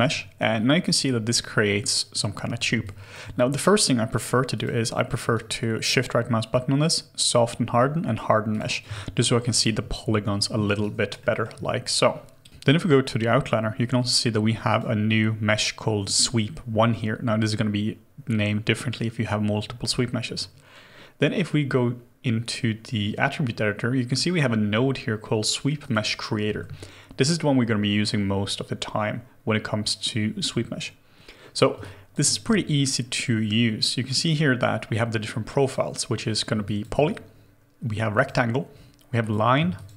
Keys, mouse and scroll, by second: 2.8 alt+click, 5.3 shift+right click, 8.9 alt+click, 10.0 shift+g, 10.7 shift+g, 10.8 alt+right click, 11.2 alt+middle click, 31.8 alt+click, 36.6 alt+click, 39.7 alt+click.